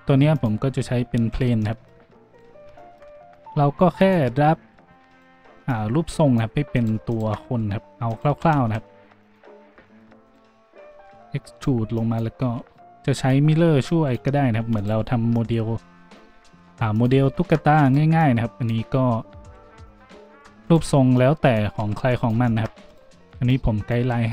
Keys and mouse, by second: 1.4 shift+g, 2.1-4.1 drag, 3.3 g, 4.1-5.1 middle drag, 4.1 Tab, 5.1 click, 5.2 middle click, 5.7-6.7 drag, 6.8 shift+click, 7.2-9.3 shift+drag, 9.3 middle click, 9.3 s, 10.2 click, 10.3-12.0 middle drag, 10.9 e, 12.0-13.3 drag, 13.3 middle click, 13.3 s, 13.9-17.1 drag, 15.6 e, 17.1-18.2 shift+middle drag, 17.1 s, 18.2 e, 20.0 s, 21.2 e, 22.3 s, 23.5 e.